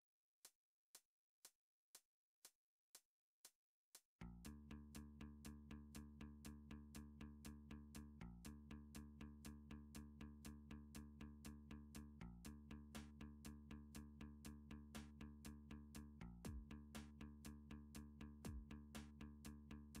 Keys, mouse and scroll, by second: 0.9 click, 2.7 e, 9.3 click, 10.5 alt+s, 15.4 click, 16.5 e.